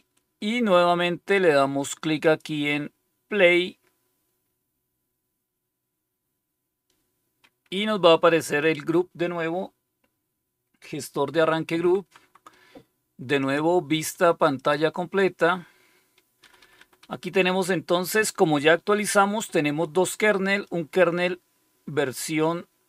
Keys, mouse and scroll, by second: 2.2 click, 11.7 Down, 12.2 Down, 13.3 click, 14.5 click, 16.4 Up, 16.5 Up, 16.7 Up, 16.9 Up.